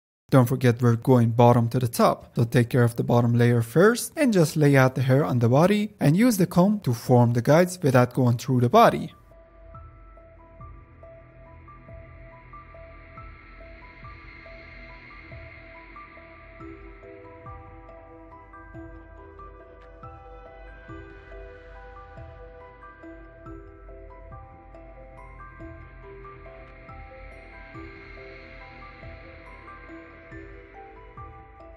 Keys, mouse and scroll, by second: 0.1 click, 0.6 middle click, 0.7 click, 1.3 middle click, 1.3 scroll up 1, 1.4-2.0 drag, 2.0 middle click, 2.1 click, 2.4 middle click, 2.6 click, 2.7 middle click, 2.8 click, 2.9 middle click, 3.1 click, 3.4 middle click, 3.5 click, 3.8 middle click, 4.0 click, 4.3 middle click, 4.4 click, 4.5 middle click, 4.8-5.5 drag, 5.5 scroll down 1, 5.5 click, 6.1 middle click, 6.1-6.5 drag, 6.5 middle click, 6.6-7.1 drag, 7.1 f, 7.2 middle click, 7.2 click, 7.3 middle click, 7.4 click, 7.4 middle click, 7.5 drag, 7.8 middle click, 7.9 click, 8.1 middle click, 8.2 scroll up 1, 8.3 click, 8.5 middle drag, 8.6 drag, 8.9 middle click, 9.2 click, 9.7 f, 9.8 click, 9.9 middle click, 10.2 click, 10.7 middle click, 11.1 click, 11.4 middle click, 11.4 f, 11.5 click, 11.6 middle drag, 11.7 click, 12.0 middle click, 12.1 f, 12.2 click, 12.4 middle click, 12.5 click, 12.6 middle drag, 12.7-13.2 drag, 13.2 middle click, 13.4 click, 13.5 middle click, 13.9 click, 14.1 middle click, 14.4 click, 14.6 middle click, 14.7 ctrl+s, 14.8 click, 14.9 f, 14.9 click, 15.4 F10, 15.5 click, 15.9 middle click, 16.1 click, 16.1 middle click, 16.2 click, 16.5 middle click, 16.6 ctrl+z, 16.7 middle click, 16.8 click, 17.0 middle click, 17.1 click, 17.5 middle click, 17.6-18.0 drag, 18.0 middle click, 18.1 click, 18.3 middle click, 18.7 click, 19.5 middle click, 19.6 click, 19.8 middle click, 19.9 click, 20.2 middle click, 20.2 click, 20.5 middle click, 20.6 f, 20.7 click, 21.3 middle click, 21.4 click, 21.4 middle click, 21.5 click, 22.0 ctrl+s, 22.1 click, 22.8 alt+Right, 22.8 f, 22.9 click, 23.2 middle click, 23.4 f, 23.4 click, 23.9 middle click, 24.0-25.0 drag, 25.0 middle click, 25.3 click, 26.0 middle drag, 26.2 click, 26.6 f, 26.7 click, 26.9 f, 27.0 click, 27.1 middle click, 27.3-28.7 drag, 28.7 middle click, 28.9 click, 29.2 middle drag, 29.3-30.4 drag, 30.4 f, 30.5 click, 30.6 middle click, 30.8 f, 30.8 click, 31.1 middle click, 31.3 f, 31.4-31.7 drag.